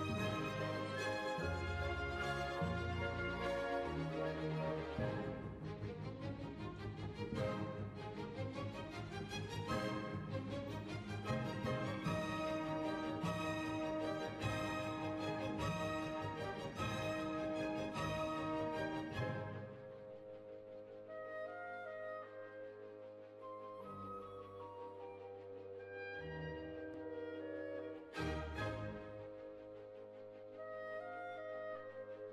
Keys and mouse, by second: 4.3 x, 4.9 z, 8.7 KP_3, 9.3 Tab, 9.9 Tab, 10.5 z, 11.4-12.6 right drag, 12.0-14.5 drag, 15.3 z, 16.6 ctrl+r, 19.1-21.4 drag, 19.4-20.6 right drag, 21.4-23.0 right drag, 22.2 click, 23.0 middle click, 23.4 KP_3, 24.5 z, 24.5 click, 25.4 right click, 25.7 middle click, 26.6 e, 27.6 g, 28.7 s, 29.7 click, 32.0 ctrl+r.